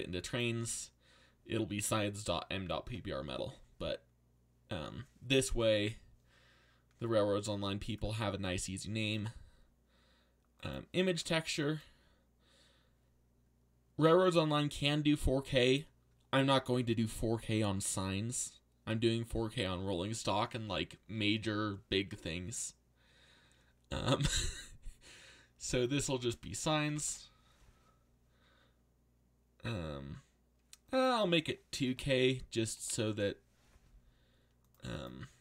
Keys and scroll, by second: 10.7 i, 25.9-27.3 typing, 31.8-33.6 typing.